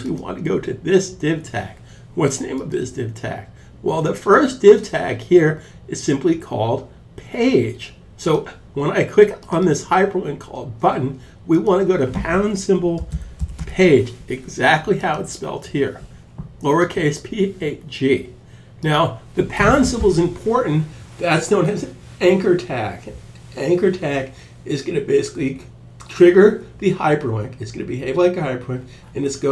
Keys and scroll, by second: 12.0-13.5 typing.